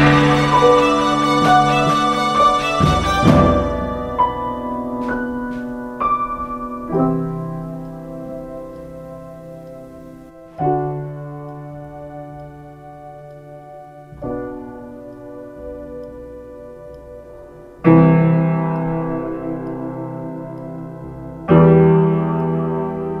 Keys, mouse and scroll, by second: 2.9 ctrl+z, 21.7 ctrl+z.